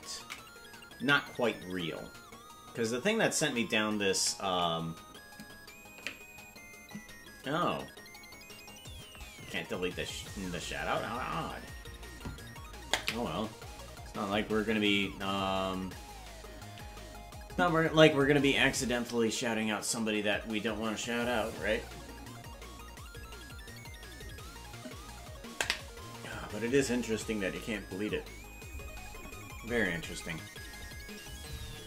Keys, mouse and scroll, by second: 2.7 ctrl+s.